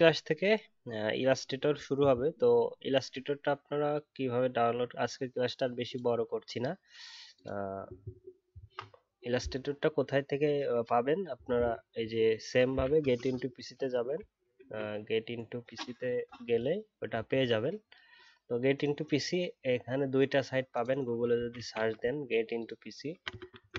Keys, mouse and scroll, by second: 0.4-2.0 alt+scroll up 1.